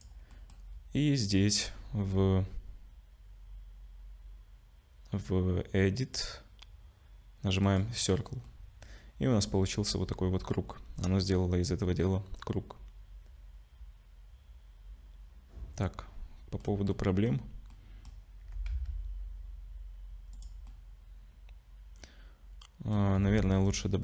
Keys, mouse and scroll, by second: 0.4 middle click, 6.2 click, 7.6 click, 8.5 middle click, 16.9 middle click, 17.7 middle click, 18.4 g, 20.7 middle click, 23.2 Tab.